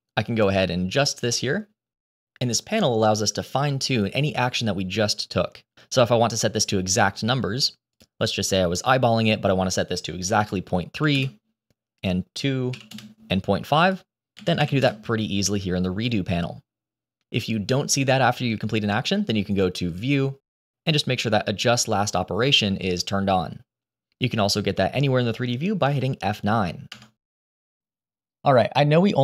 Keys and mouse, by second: 1.0-2.6 drag, 3.2-5.6 drag, 7.8-11.1 drag, 11.9 click, 13.9 click, 19.8-24.1 drag, 26.8 F9.